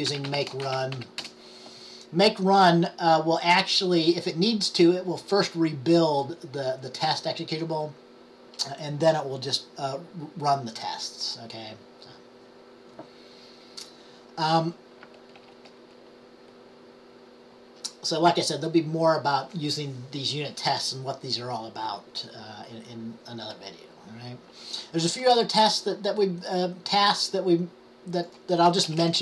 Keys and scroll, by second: 0.2-1.6 typing.